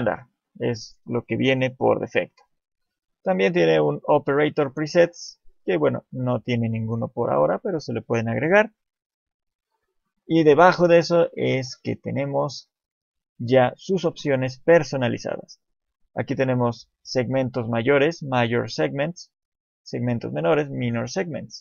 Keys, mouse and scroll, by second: 2.1 click, 5.7 click.